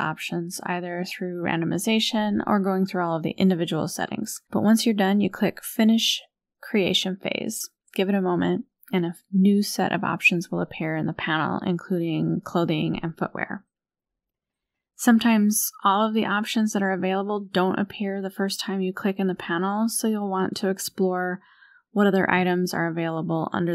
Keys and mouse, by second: 0.9 click, 1.4 shift+middle click, 3.1 click, 3.4 click, 4.5-10.1 drag, 12.4 click, 14.5-18.3 drag, 19.0-19.9 drag, 20.3-22.0 drag, 22.5-23.4 drag.